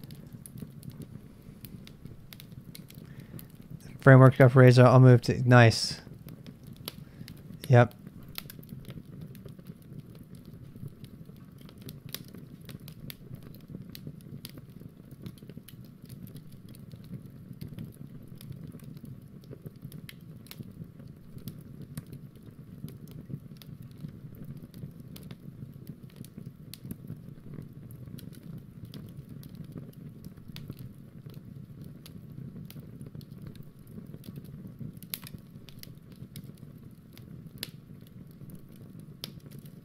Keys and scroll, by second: 0.0-0.8 typing, 12.6 ctrl+alt+r, 14.1 BackSpace.